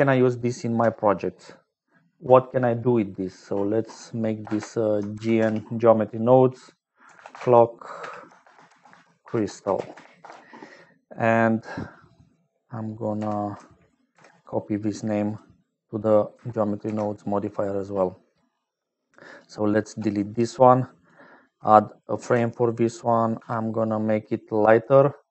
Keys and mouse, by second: 13.1 F2, 15.2 click, 16.8 ctrl+v, 19.4 click, 20.1 click, 21.0 click, 22.1 ctrl+j, 23.6 n, 24.9 click.